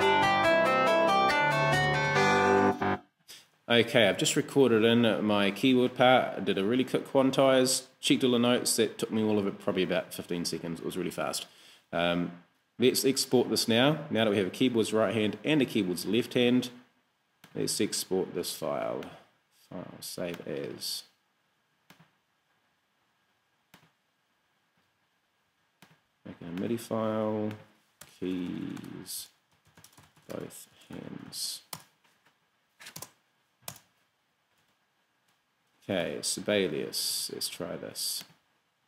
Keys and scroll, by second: 2.7 space, 18.7 super+s, 28.1-32.0 typing, 33.4 shift+Return, 34.5 super+Return, 34.9 super+Tab, 36.1 super+w.